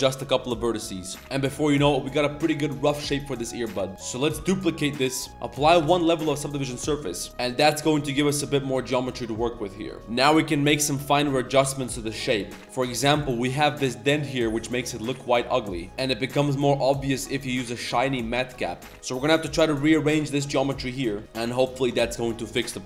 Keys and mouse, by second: 0.4 click, 1.2 Tab, 1.2 middle click, 1.3 Tab, 1.4-1.8 middle drag, 2.1-3.9 middle drag, 3.9 ctrl+s, 4.0 middle drag, 4.4 shift+d, 5.8 ctrl+a, 6.2-6.5 middle drag, 6.7 Tab, 6.8 click, 7.1 shift+click, 7.3-7.7 drag, 8.4 shift+middle drag, 8.6 Tab, 8.7-9.1 middle drag, 9.2 shift+middle click, 9.4-9.9 middle drag, 10.1 middle drag, 10.4 middle drag, 11.1 middle drag, 11.5 shift+middle drag, 11.9 middle click, 12.5-13.1 middle drag, 12.6 Tab, 12.6 ctrl+2, 12.6 ctrl+3, 13.7-15.8 middle drag, 16.1-17.9 middle drag, 17.2 click, 17.2 right click, 17.5 click, 17.5 right click, 17.6 click, 17.6 right click, 17.9 click, 17.9 right click, 18.6 middle click, 18.7-19.1 middle drag, 19.2 Tab, 19.5 z, 19.8 click, 20.1 z, 20.8 middle click, 21.2 a, 21.4 Tab, 21.4 middle drag, 21.4 z, 21.6 z, 21.8 Tab, 22.0 middle click, 22.5 middle click, 22.8 middle click.